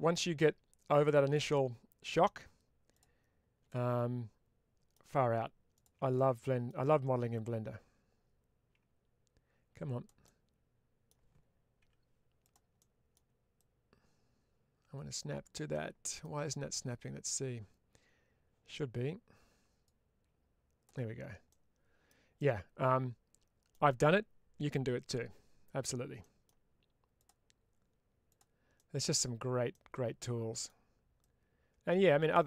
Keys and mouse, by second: 1.2 middle click, 2.8 click, 3.6-4.8 middle drag, 5.6 ctrl+click, 6.0 middle click, 7.3-9.1 drag, 10.1 middle click, 11.7 1, 12.3 click, 12.6 middle click, 13.5-15.4 drag, 15.6 middle click, 19.7-20.7 drag, 21.4 middle click, 22.2-23.6 middle drag, 26.1 middle click, 27.1 click, 28.1 click, 28.6 middle click, 29.6 middle click, 31.1-32.2 ctrl+drag.